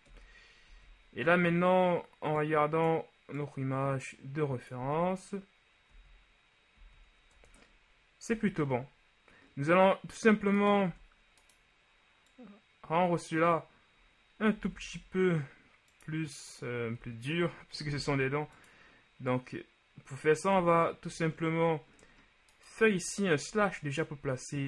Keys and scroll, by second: 0.3 KP_1, 0.8 z, 5.0 z, 7.4 Tab, 8.4 a, 11.1 Tab, 14.8 s, 14.9 z, 18.0 s, 18.1 z, 20.7 Tab, 21.2 a, 23.7 KP_Divide.